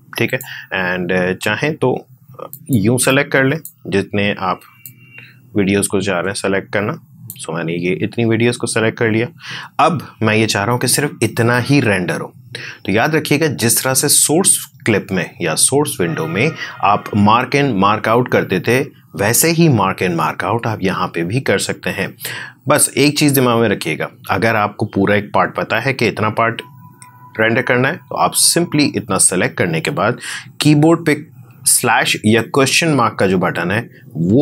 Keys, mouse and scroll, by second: 34.3 /.